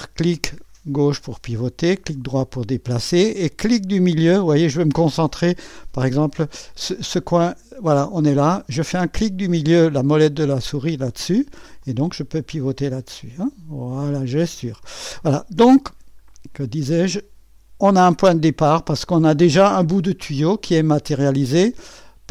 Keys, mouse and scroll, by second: 2.2 click, 2.2 right click, 5.7-6.8 drag, 10.8 middle click, 11.8-14.8 drag, 18.7 click, 20.9 click.